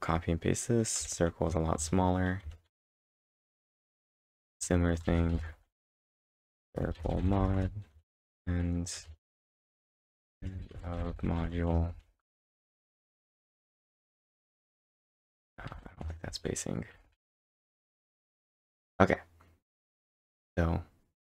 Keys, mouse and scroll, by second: 0.0-0.5 typing, 1.8 ctrl+Tab, 2.5 ctrl+Tab, 2.5-5.0 typing, 2.7 ctrl+Tab, 6.3-19.1 typing, 20.2 ctrl+Tab, 20.2 typing.